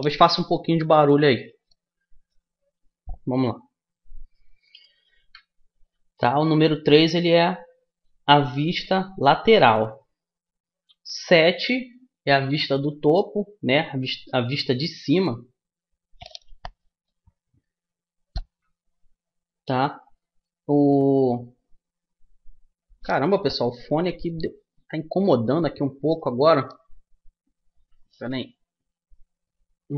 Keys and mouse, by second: 5.7 KP_3, 11.6 KP_7, 13.2-29.9 middle drag.